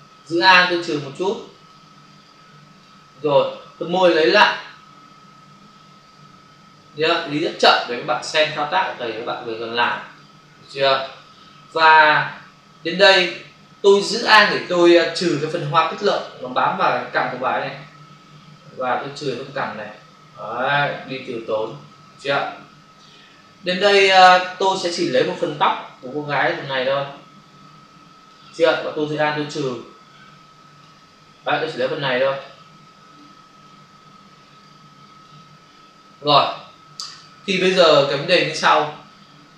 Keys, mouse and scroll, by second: 0.7 alt+click, 2.3 alt+click, 4.1 click, 8.7 click, 9.8 space, 12.1 click, 12.3 space, 16.0 alt+click, 22.6 ctrl+-, 26.0 click, 29.6 alt+click, 31.9 click, 33.2 click, 34.6 click, 38.1 ctrl+o.